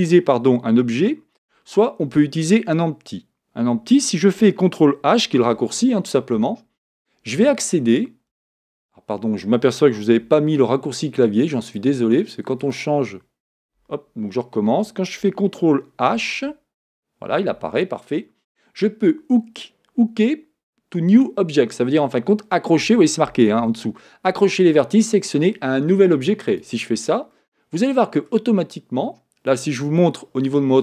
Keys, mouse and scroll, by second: 16.4 ctrl+h, 27.3-30.8 middle drag.